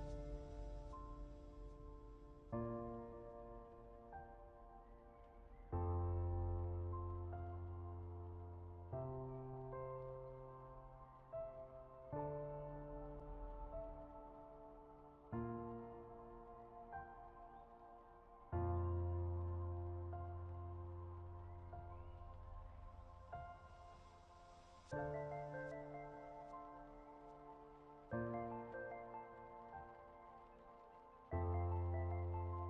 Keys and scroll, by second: 7.6 ctrl+g.